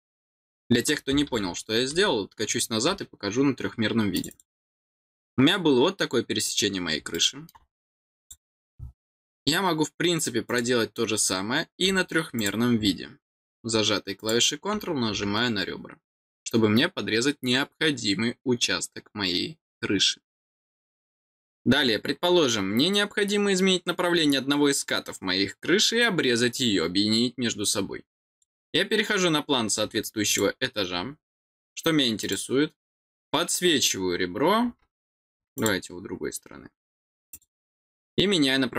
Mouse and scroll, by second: 4.1 click, 4.3 click, 7.1 middle click, 8.2 click, 10.4 click, 12.3 click, 14.2 click, 20.8-23.4 scroll down 1, 23.4-26.1 scroll down 1, 26.1-28.3 scroll down 1, 28.3 click, 28.4 click, 30.2 click, 30.9 scroll down 1, 32.2 click, 35.5 click, 37.3 click.